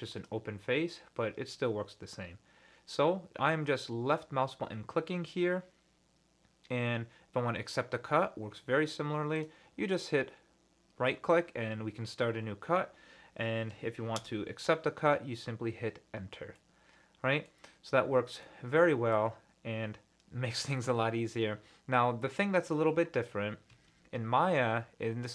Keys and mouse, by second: 16.6 middle click, 18.4 middle click, 22.0 middle click.